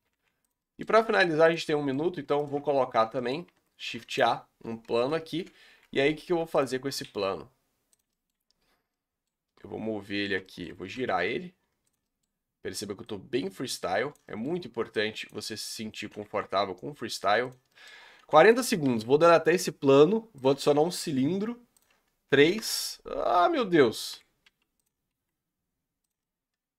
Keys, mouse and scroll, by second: 0.6 middle click, 1.0 g, 1.6-2.4 middle drag, 2.4 shift+right drag, 2.7 scroll up 2, 3.1-3.4 shift+middle drag, 3.4 shift+a, 4.5 scroll up 1, 5.4 KP_Decimal, 5.7 Tab, 6.0 scroll up 1, 6.2 s, 7.0 s, 8.1 middle click, 8.3-8.9 scroll up 6, 8.9-10.8 middle drag, 10.8 r, 12.0-13.1 middle drag, 13.1 click, 14.3 middle click, 15.2 click, 15.5 middle click, 16.1 s, 17.7-18.5 middle drag, 18.5 Delete, 20.4 shift+a, 22.5 click, 23.2 s, 24.4 s, 25.2 s, 26.2 middle click.